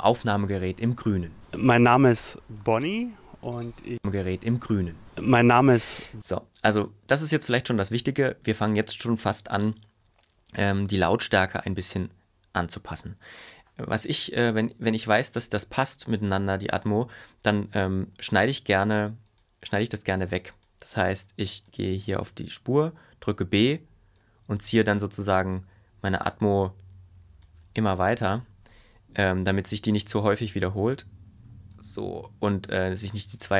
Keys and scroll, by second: 6.2 space, 18.4 b, 22.7 b.